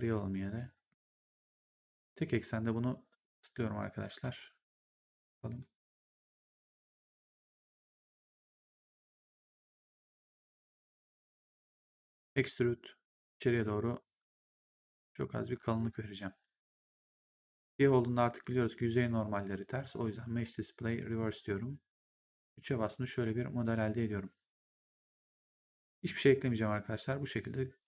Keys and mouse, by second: 0.8 r, 1.7 click, 4.7 middle click, 7.3 click, 9.4 click, 12.1 click, 13.5 click, 18.3 right click, 19.9 click, 22.2 3, 22.7 click, 27.3 click.